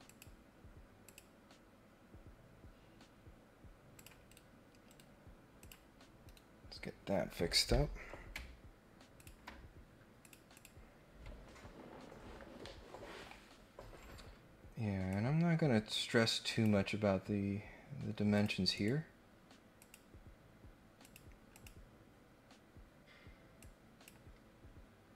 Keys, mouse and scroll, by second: 0.1 click, 1.0 click, 3.9 click, 4.2 Escape, 4.8 Escape, 5.6 click, 9.2 ctrl+click, 10.2 click, 10.5 click, 15.1-16.6 drag, 18.3 click, 18.7 right click, 19.7 click, 21.0 click, 21.5 click, 23.6 click.